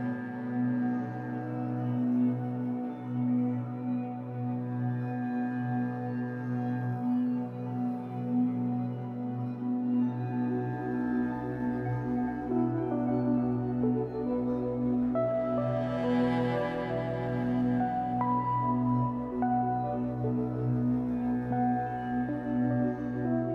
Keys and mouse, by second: 0.0 space, 1.2 alt+shift+click, 2.0 click, 3.1 click, 3.9 click, 6.2-6.9 drag, 8.0 i, 9.9 Right, 10.1 Right, 10.2 Right, 10.3 typing, 11.2 click, 12.1 click, 13.4 Right, 14.8-15.2 drag, 16.6-19.2 typing, 17.5 click, 17.8-21.2 shift+drag, 20.9 typing.